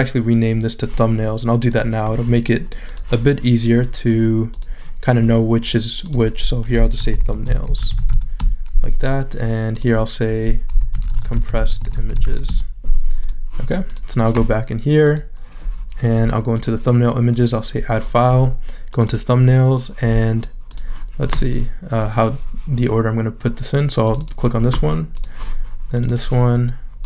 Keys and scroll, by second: 6.8-8.6 typing, 10.6-12.7 typing.